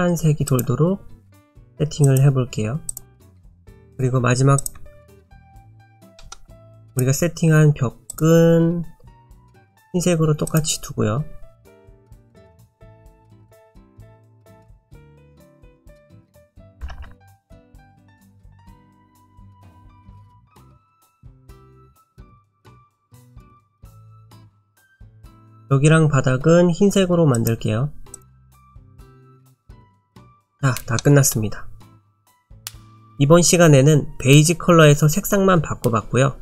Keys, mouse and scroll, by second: 0.5 click, 2.9 click, 3.2-3.9 scroll down 1, 3.9 click, 3.9-4.3 scroll down 2, 4.6 shift+click, 4.7 shift+click, 5.1 click, 5.4-6.2 scroll down 7, 6.2 middle click, 6.6 click, 6.9 click, 8.7 click, 9.5 click, 10.5 click, 13.0 click, 14.3 click, 17.0 BackSpace, 21.7 click, 23.3 click, 28.2 click, 28.8 middle click, 29.5-31.0 scroll up 9, 31.0 middle click, 32.0-32.5 scroll down 1, 32.5 middle click, 32.8 click.